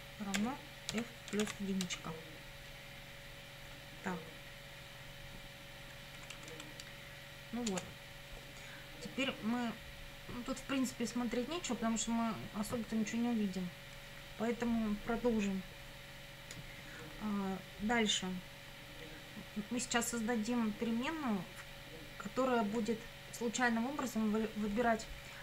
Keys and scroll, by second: 0.0-1.9 typing, 6.2 Down, 7.7 Return.